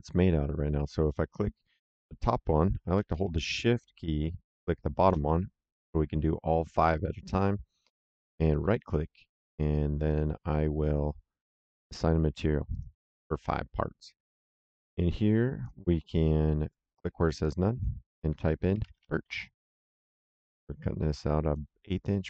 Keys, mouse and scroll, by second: 4.5 shift+click, 8.4 right click, 12.6 click, 14.2 click, 17.3 click, 18.4-19.7 typing, 21.3 click.